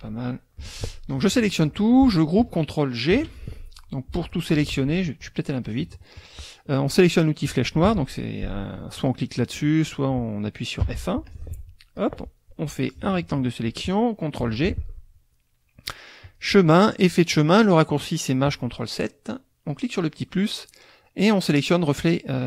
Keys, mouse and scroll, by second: 0.6 F1, 1.1 click, 3.1 ctrl+g, 4.7 ctrl+z, 5.6 click, 7.4 click, 9.4 click, 10.8 F1, 11.2 click, 12.9 click, 14.4 ctrl+g, 16.3 click, 18.5 click, 19.7 click, 21.5 click.